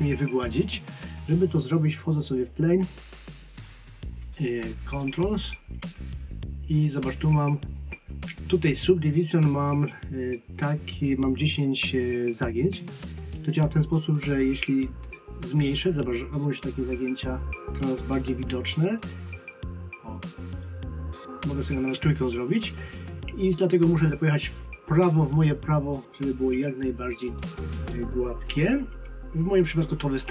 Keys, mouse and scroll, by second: 2.8 click, 14.1 click, 19.0 click, 27.2 scroll down 1.